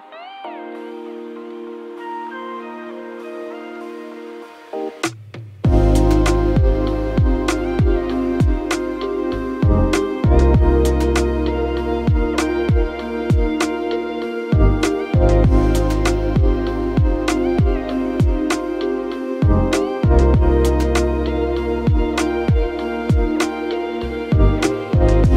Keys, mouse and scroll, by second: 8.5 1, 9.1 ., 9.6 5, 9.8 Return, 13.7 2, 14.8 Return, 21.6 2, 22.1 ., 22.7 5, 23.0 Return.